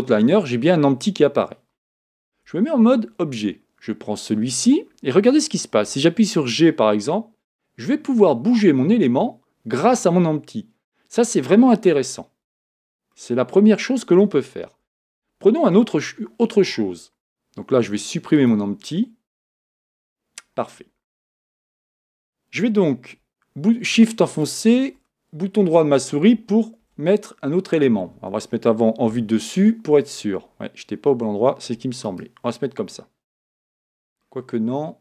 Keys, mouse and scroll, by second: 2.3 Tab, 4.2 click, 5.8 g, 13.1-14.6 middle drag, 14.6 Tab, 16.0-18.4 shift+middle drag, 18.4 click, 19.4 x, 21.3 Tab, 24.3-26.8 shift+right drag, 27.7 shift+a, 29.1 KP_7, 32.0 shift+right click, 34.2-35.0 middle drag.